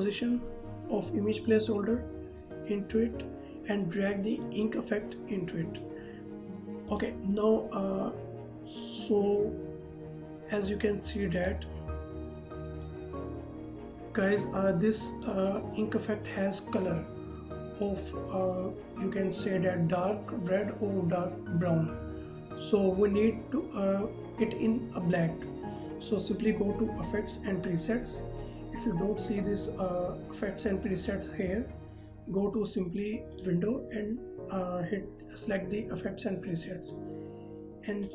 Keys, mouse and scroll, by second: 4.6 click, 11.6 click, 33.5 click.